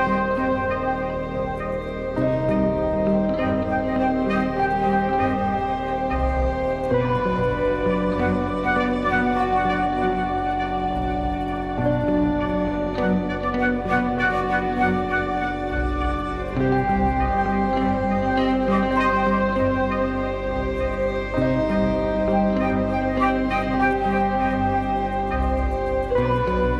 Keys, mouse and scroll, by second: 0.5-1.5 drag, 4.4-5.1 drag, 6.9 drag, 9.0 click, 9.7 click, 11.0-12.7 drag, 13.0-14.2 drag, 15.1 middle click.